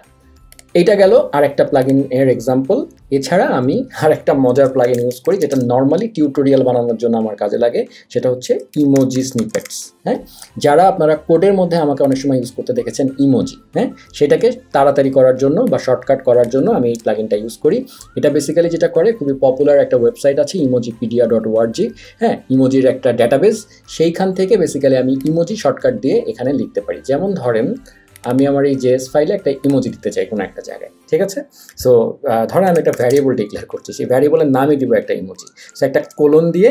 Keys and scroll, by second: 4.5 super+a, 4.6-5.9 typing, 8.2-10.1 typing, 16.9 BackSpace, 32.4-33.4 typing, 36.0-36.7 typing.